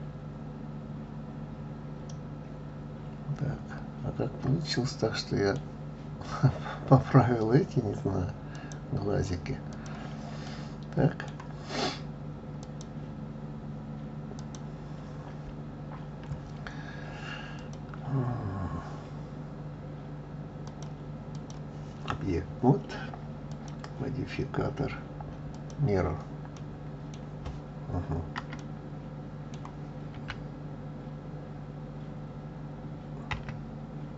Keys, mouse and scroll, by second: 8.5 click, 9.7 click, 10.4-12.6 middle drag, 12.6 click, 14.3 click, 16.5 scroll down 2, 17.5 click, 20.6-26.5 drag, 26.5-27.5 middle drag, 27.5-28.5 scroll up 3, 28.5-30.1 middle drag, 30.1 s.